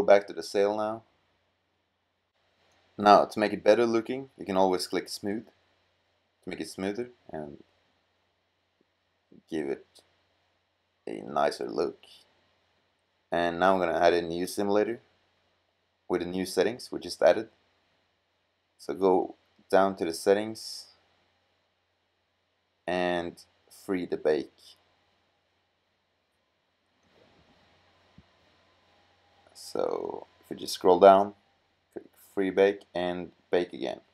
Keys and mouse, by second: 4.5 middle click, 5.2-6.2 middle drag, 7.3-10.6 middle drag, 31.2-33.8 drag.